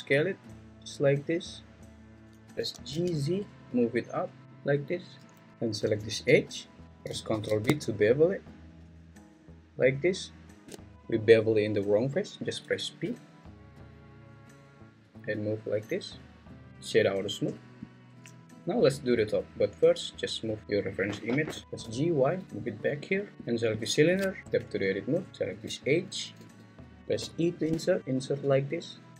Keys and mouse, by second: 2.0 click, 2.6 g, 2.9 z, 4.7 click, 5.5 ctrl+z, 7.3 ctrl+b, 13.1 p, 16.7 Tab, 16.7 right click, 18.4 `, 20.6 g, 21.3 Escape, 21.6 g, 21.8 y, 22.6 click, 24.4 Tab, 25.3 alt+click, 26.4 `, 27.2 i.